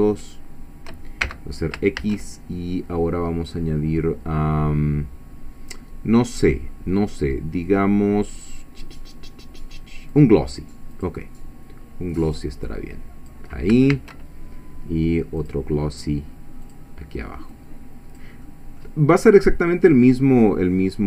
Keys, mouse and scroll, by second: 0.2 shift+click, 1.2 shift+x, 2.0 shift+a, 10.1 click, 10.9 click, 12.3-13.5 drag, 13.9 shift+a, 15.4 click, 16.7 click, 17.5 click, 18.5 middle click, 19.9-21.0 drag.